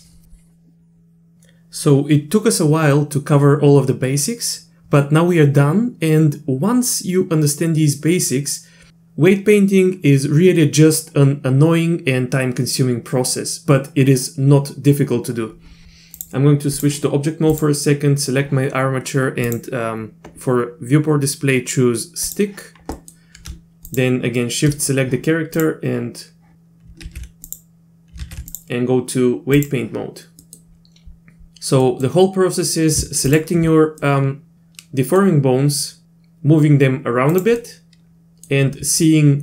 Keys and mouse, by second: 16.2-16.8 drag, 19.5-22.4 drag, 23.0 middle click, 25.6 click, 27.1 ctrl+z, 28.2 ctrl+z, 28.5-29.7 drag, 30.5 middle click, 31.8 middle click, 33.3 ctrl+click, 34.0-35.2 middle drag, 36.0 r, 37.6 middle click, 39.1 middle click.